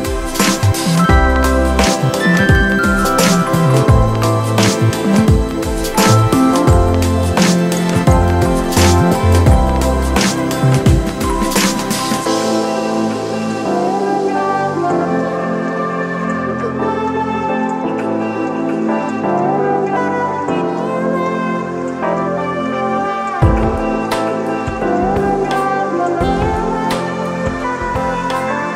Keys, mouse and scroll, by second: 4.7 ctrl+0, 12.2 ], 14.5 ], 19.7 ctrl+z, 20.3 [.